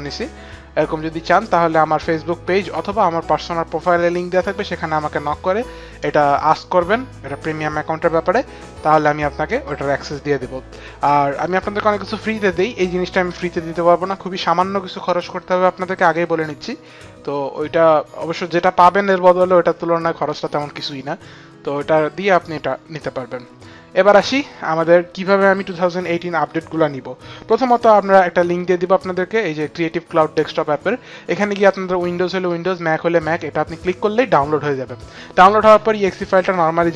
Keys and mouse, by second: 27.3 click.